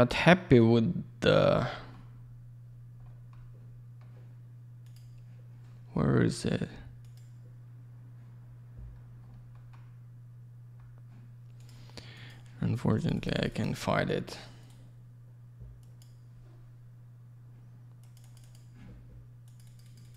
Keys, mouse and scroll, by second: 12.1 click, 12.2 click, 12.9 click, 13.0 click, 13.1 click, 13.2 double click, 13.3 click, 13.3 click, 13.4 click, 13.5 double click, 14.5 right click, 14.6 right click, 15.7 click, 15.9 click, 18.2 click, 19.4 click, 19.6 click, 19.8 click, 19.9 double click, 20.0 click, 20.1 click.